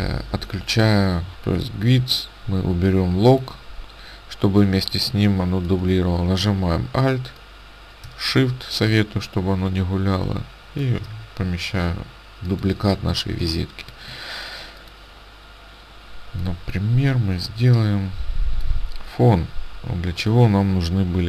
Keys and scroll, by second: 5.1 space, 13.5 space.